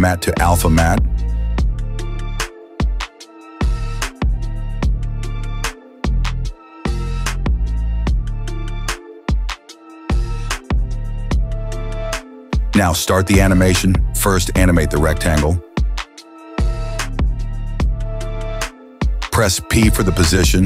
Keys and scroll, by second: 9.5 ctrl+z.